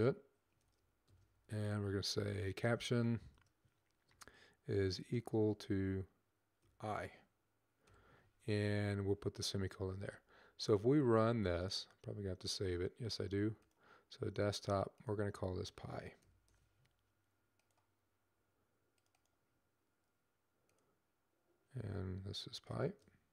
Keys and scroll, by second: 0.2-1.0 typing, 2.2-2.9 typing, 7.7 typing, 15.9-16.7 typing, 22.7-23.2 typing.